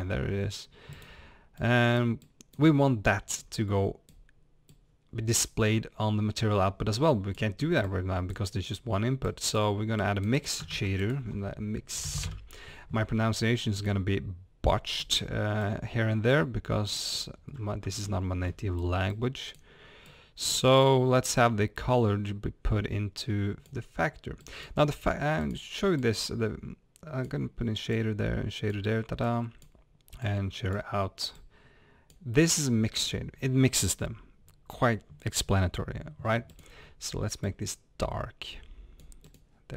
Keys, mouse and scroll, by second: 0.0 click, 5.4-8.2 drag, 10.0 click, 15.6 click, 26.0 drag, 27.9 drag, 32.3-37.4 drag.